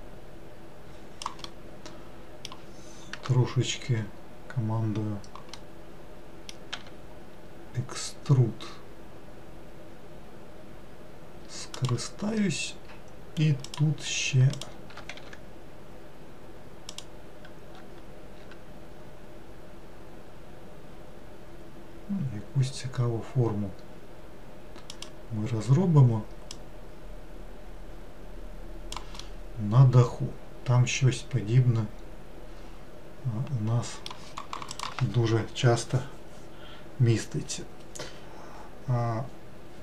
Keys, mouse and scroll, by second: 1.5-4.6 middle drag, 5.6-6.8 middle drag, 6.8 e, 13.7 click, 14.6 shift+click, 15.3 e, 18.5 s, 26.6 click, 29.3-32.4 middle drag.